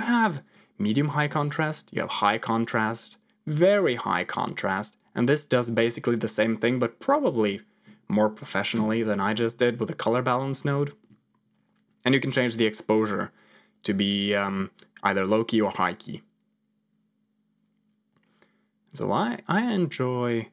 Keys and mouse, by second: 0.0 click, 12.9-20.5 drag.